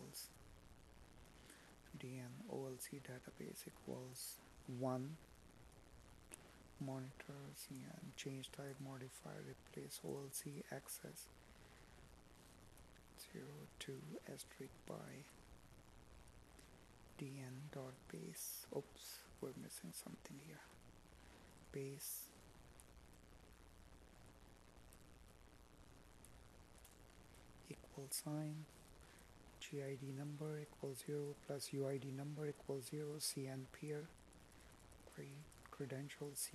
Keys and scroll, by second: 4.7 space, 11.9 space, 13.0 Escape, 13.9 space, 19.9 space.